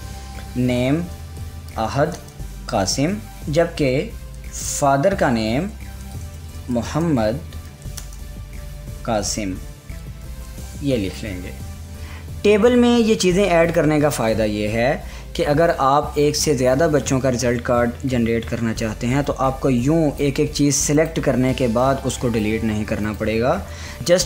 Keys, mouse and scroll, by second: 1.3-5.4 typing, 6.4-11.5 typing, 14.2 typing, 16.1 click, 19.8-24.0 drag.